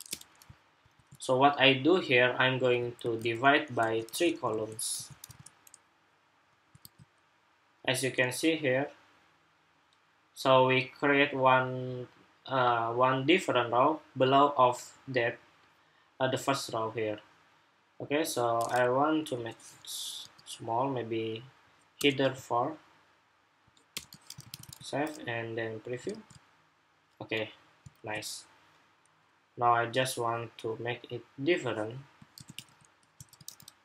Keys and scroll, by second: 0.7 super+s, 2.7 super+c, 3.8 super+v, 4.3 super+v, 4.7 super+s, 5.0 super+Tab, 6.6 super+r, 24.4 super+Tab.